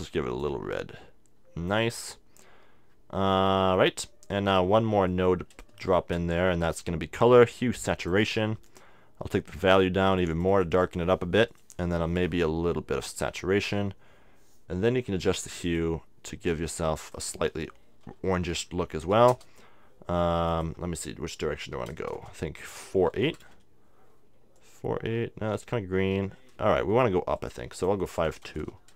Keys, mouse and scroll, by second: 3.2-4.3 middle drag, 4.3-6.8 drag, 4.3 right click, 5.1 middle click, 5.9 shift+a, 8.8-14.8 drag, 15.7-18.5 drag, 20.5-22.2 drag, 22.2 BackSpace, 24.6-26.3 drag, 27.4-28.9 drag, 28.5 BackSpace.